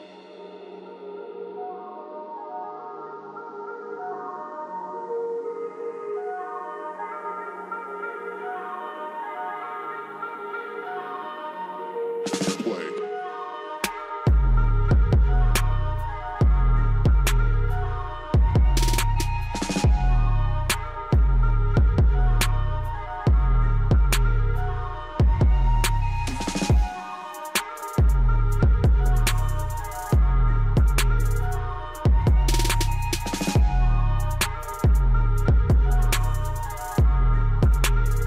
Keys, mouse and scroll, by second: 0.7 right click, 1.9 click, 3.7 ctrl+shift+q, 4.2 click, 4.7 scroll up 1, 5.5 click, 6.4-6.8 scroll down 1, 8.7-16.7 drag, 16.7-17.7 typing, 18.0 click, 22.4 scroll down 1, 24.2 click, 24.7 scroll up 1, 25.2 click, 26.1 scroll up 1, 28.0-29.9 drag, 29.9 ctrl+right click, 30.6 scroll down 1, 32.5 ctrl+r, 38.0 click.